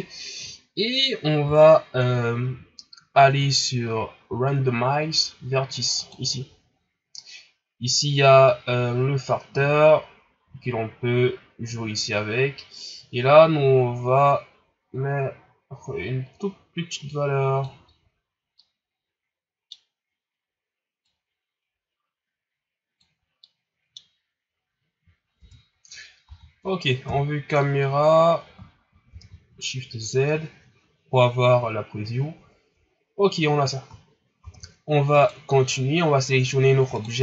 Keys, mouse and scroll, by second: 8.6-11.5 drag, 18.2-18.6 scroll down 2, 18.6-21.2 middle drag, 21.2-23.4 drag, 23.4-24.8 middle drag, 24.8-25.4 scroll up 2, 25.4 Tab, 26.0 scroll down 2, 26.2 a, 27.1 KP_0, 27.9 scroll up 4, 29.3 shift+z, 34.6 shift+z, 35.1 right click, 35.6-37.2 scroll down 1.